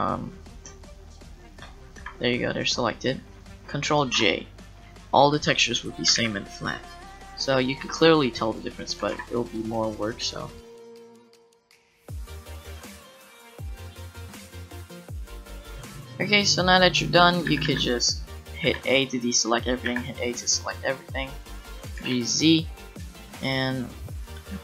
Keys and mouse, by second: 2.0 g, 4.0 ctrl+j, 6.2 ctrl+z, 8.4-10.7 drag, 8.4-10.7 right drag, 9.0 g, 10.9-15.6 typing, 14.4 click, 16.1 click, 17.5 a, 17.7 a, 19.1 a, 19.8 a, 21.9 g, 24.2-24.6 drag.